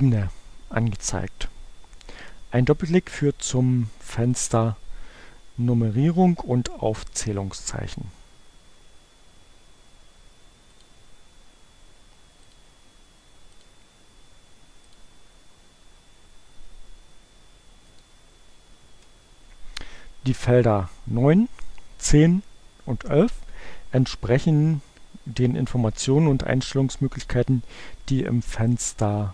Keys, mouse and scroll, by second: 2.6-4.9 drag, 10.0-11.3 drag, 12.5 click, 13.5 click, 14.9 click, 17.7 click.